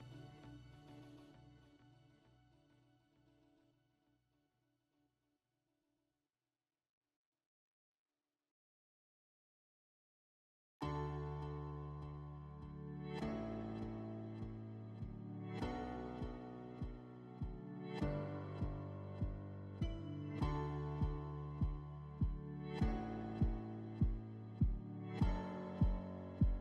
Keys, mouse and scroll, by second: 0.2 click, 1.1 click, 1.7 click, 2.5 right click, 3.2 click, 4.0 click, 4.5 click, 5.1 click, 6.6 click, 7.0 click, 8.3 click, 9.3-10.0 scroll, 10.4 scroll, 12.4 alt+middle click, 13.7 alt+middle click, 14.1-14.4 scroll, 14.5 click, 15.6 click, 16.5 click, 18.4 click, 19.2 click, 19.6 click, 20.0 click, 20.5 click, 21.2 click, 21.7 click, 22.4 click, 24.8 click, 25.3 click, 26.2 click.